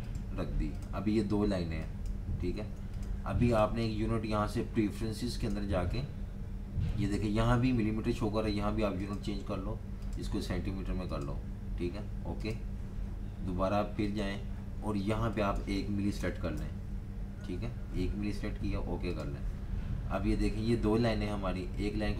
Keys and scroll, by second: 2.6 super+z, 15.9-17.6 typing.